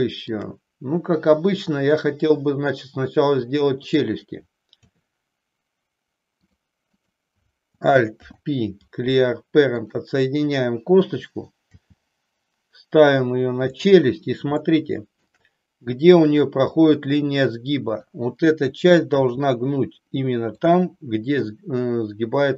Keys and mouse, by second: 3.8 click, 4.9 e, 7.2 click, 8.3 alt+p, 11.7 g, 14.8 shift+middle click, 17.9 click, 19.3 g, 20.6 click.